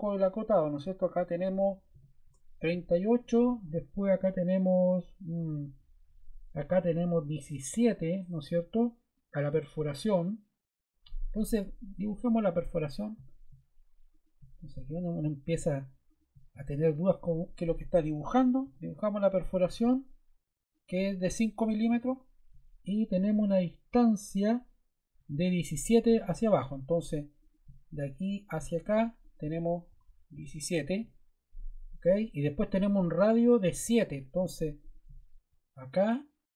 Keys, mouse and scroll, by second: 1.3-2.2 typing, 17.7 Escape, 18.6 d, 19.5 click, 20.7 click, 21.9 5, 22.0 Return, 29.8-30.5 typing.